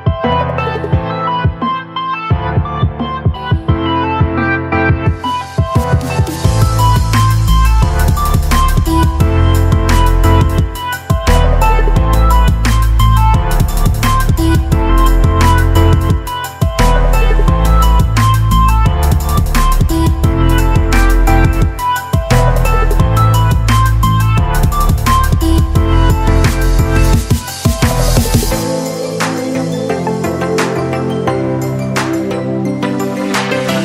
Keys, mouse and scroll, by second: 7.7 Delete, 8.7 click, 9.1 Delete, 10.0 click, 11.1 Delete, 11.6-14.7 drag, 28.2-28.8 drag.